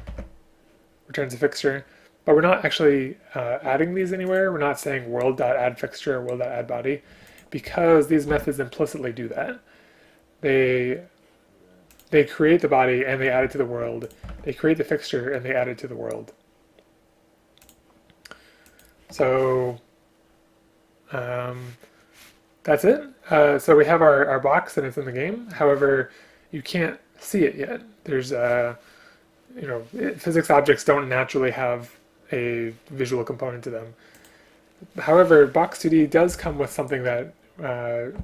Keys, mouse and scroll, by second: 0.1 ctrl+q, 8.3 ctrl+q, 14.3 ctrl+q, 36.3 Return, 36.5 Return.